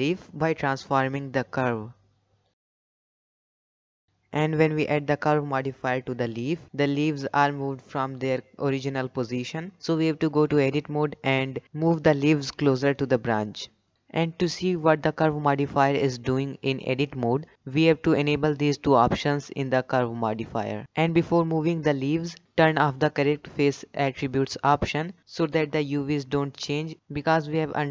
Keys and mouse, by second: 1.8 g, 3.4 Tab, 5.0 KP_7, 5.8 shift+middle drag, 7.0 click, 8.9-10.0 shift+middle drag, 10.6-11.4 shift+middle drag, 12.8 Tab, 17.1 click, 17.9 click, 18.7 l, 18.9 z, 21.3 g, 24.0 g, 26.1-26.9 drag, 27.4 shift+middle click.